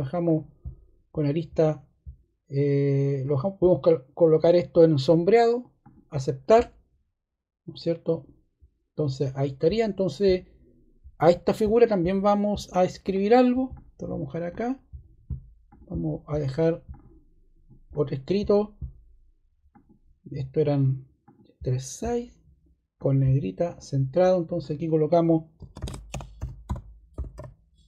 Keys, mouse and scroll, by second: 13.0 click, 13.7 click, 25.5-27.8 typing.